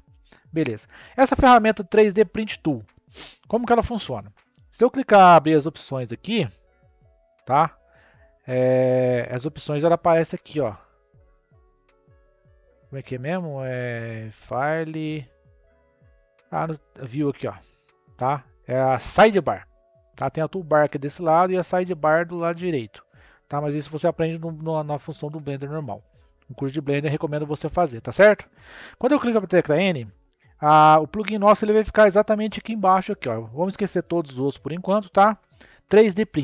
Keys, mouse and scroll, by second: 1.7 click, 4.0 click, 6.8 n, 8.3-11.4 drag, 17.0-20.1 drag, 22.0-25.1 drag, 25.1 n, 26.6-29.3 shift+middle drag, 29.3 n, 36.3 click.